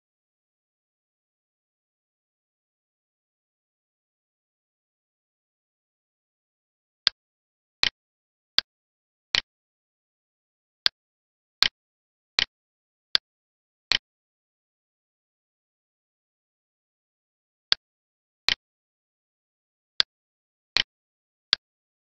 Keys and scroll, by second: 5.0 alt+e.